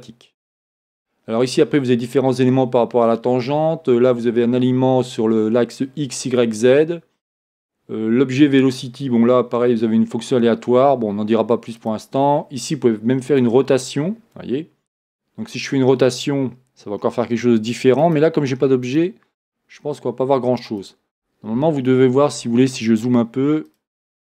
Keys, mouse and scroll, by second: 9.1-11.3 scroll down 1, 13.3 click, 18.0-21.2 drag, 21.7 scroll up 1, 23.7-24.3 drag.